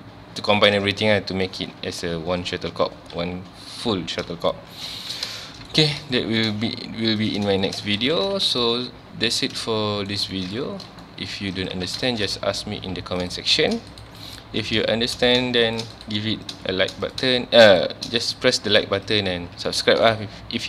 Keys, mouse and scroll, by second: 4.5 shift+middle click, 4.9 ctrl+s, 5.4-7.2 shift+middle drag, 7.2 click, 7.6 shift+middle drag, 7.9 scroll up 3, 8.0 alt+a, 8.3 ctrl+s, 8.6-10.6 middle drag, 10.6-11.0 scroll up 1, 11.0-11.5 shift+middle drag, 11.5 click, 11.7 Tab, 12.1 shift+middle drag, 12.3 scroll up 1, 12.6 1, 13.2 click, 13.6 shift+click, 14.6 click, 15.3 click, 15.7 shift+click, 16.5 click, 17.1 click, 17.7 shift+click, 18.9 Tab, 19.1 click, 19.3 Tab, 19.7-20.6 middle drag.